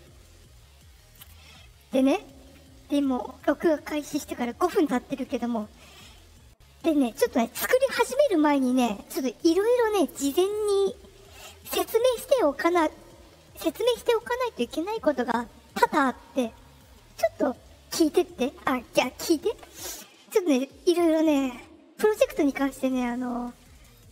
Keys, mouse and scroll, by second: 19.8 click.